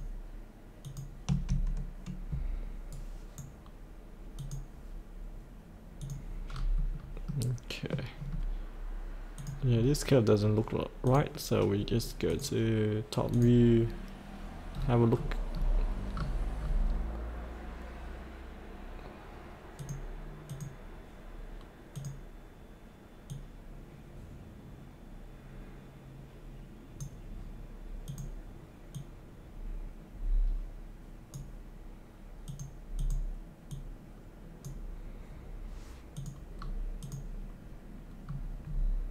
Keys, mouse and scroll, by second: 0.8 ctrl+click, 2.9 right click, 4.3 click, 6.5-7.0 scroll up 1, 7.3 middle click, 8.2 scroll down 1, 9.3 click, 9.7-10.2 scroll down 1, 11.1 click, 14.7-15.5 scroll down 1, 15.5-16.2 scroll down 1, 16.6-19.4 scroll up 1, 19.8-25.0 drag, 36.6-37.0 scroll down 1, 37.0 click, 38.2 scroll down 1.